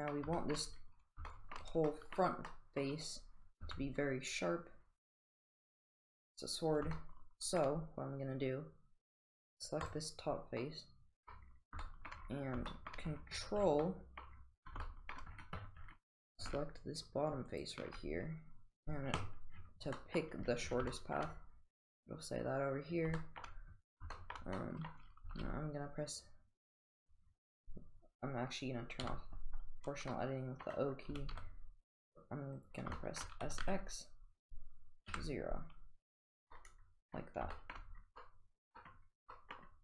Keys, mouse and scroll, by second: 0.4 shift+middle drag, 0.6 shift+scroll down 1, 1.3 shift+middle drag, 1.9 middle click, 2.5-3.0 middle drag, 3.6 Tab, 5.6 click, 7.0 shift+middle click, 10.7 middle click, 11.9 shift+middle click, 12.7 shift+middle click, 13.9 middle click, 14.9 shift+middle click, 20.0 middle click, 21.0 shift+middle click, 23.2 shift+middle click, 24.2 shift+middle click, 24.4 shift+middle click, 24.6 scroll up 1, 25.3 s, 29.0 o, 30.1-30.7 middle drag, 31.2 s, 33.0 shift+middle click, 33.5 s, 36.6-37.2 middle drag, 37.2 scroll down 1, 37.6 shift+middle drag, 38.2-39.0 middle drag, 39.4 middle click.